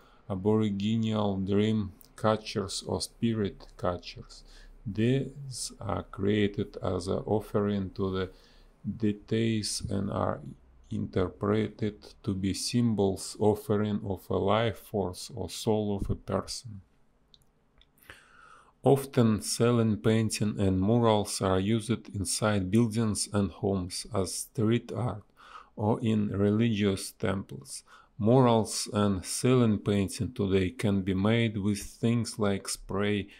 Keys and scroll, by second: 1.5-2.4 typing, 5.1 ctrl+z, 10.1 a, 11.9 space, 15.2 space, 15.9 space, 16.9 space, 19.4 space, 22.9 space, 24.3 shift+e, 25.9 space, 28.2 space, 28.7 [, 29.4 p, 30.3 ctrl+z, 30.6 a, 32.0 ctrl+z.